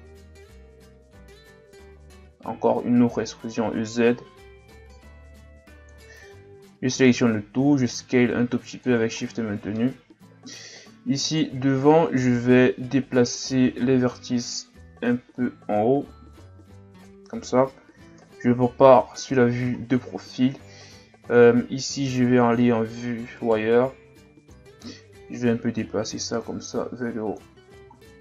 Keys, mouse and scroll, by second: 2.5 e, 6.3 a, 6.5 a, 7.5 s, 9.2-9.7 ctrl+scroll down 4, 9.7-11.2 middle drag, 11.2 right click, 12.4 click, 18.2 KP_3, 19.1-19.8 ctrl+scroll up 5, 19.8-20.2 shift+scroll down 2, 20.2-20.5 scroll up 1, 22.0 z, 23.4 right click, 23.7 b, 25.2 click, 27.5 z, 28.0-28.2 scroll down 3.